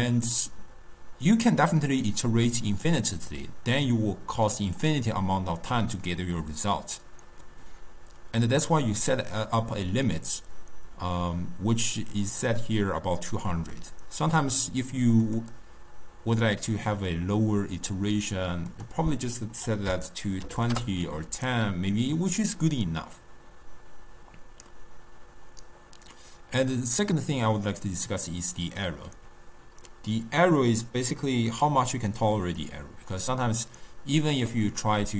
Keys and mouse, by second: 13.8-15.5 drag, 18.8-21.9 drag.